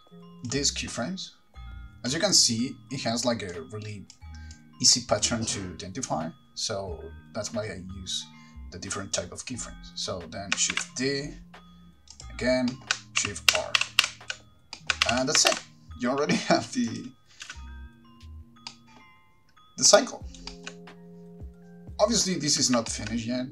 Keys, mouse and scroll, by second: 0.0 click, 1.7 click, 3.7 click, 4.7 click, 10.9 shift+d, 12.4 click, 13.4 middle click, 13.4 scroll down 2, 13.4-15.7 typing, 15.3 middle click, 15.3-15.7 scroll down 1, 17.1 click, 17.6 space, 18.9 middle click, 20.1 middle click, 20.7 shift+middle click, 22.7 space, 23.1 shift+middle click, 23.4 scroll down 2.